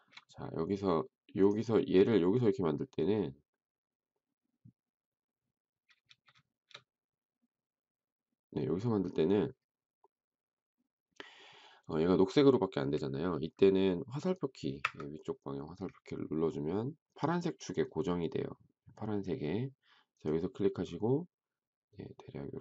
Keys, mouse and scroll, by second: 14.7 Up.